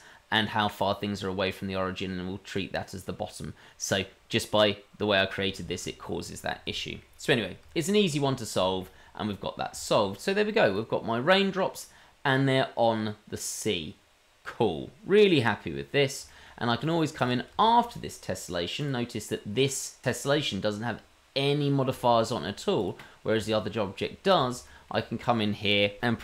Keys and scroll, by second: 5.6 shift+z, 8.0 shift+z.